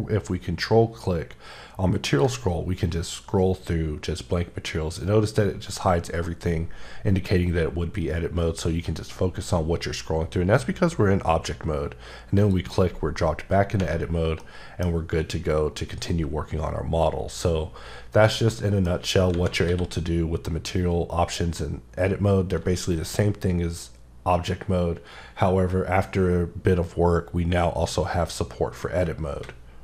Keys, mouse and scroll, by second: 2.1 ctrl+click, 2.5-3.2 scroll up 5, 3.7-5.0 scroll up 5, 5.0-5.4 scroll up 3, 5.9 scroll up 2, 6.6-7.1 scroll up 3, 7.6-8.5 scroll up 2, 8.5-10.0 scroll up 5, 10.6-11.3 scroll up 4, 12.4 click, 14.1 scroll down 2, 14.2 scroll up 1, 14.4 middle click, 18.4 middle click, 19.7 q.